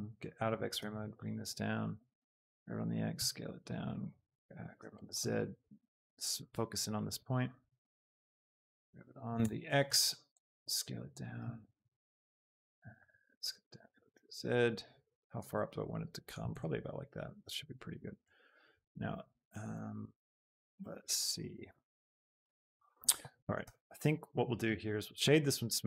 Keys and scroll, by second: 0.9 z, 2.3 g, 2.7 x, 3.1 s, 4.5 g, 4.9 z, 8.6 shift+z, 9.3 Escape, 10.0 x, 10.8 s, 11.5 z, 23.6 g, 24.0 z.